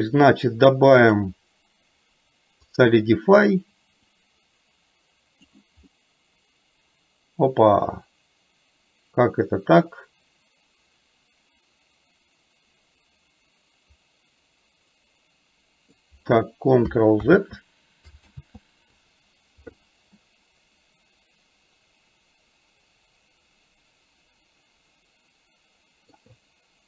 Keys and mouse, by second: 1.0-3.0 drag, 4.3-5.5 drag, 6.0-15.9 middle drag, 17.4 ctrl+z, 18.5 ctrl+z, 20.3-26.2 middle drag.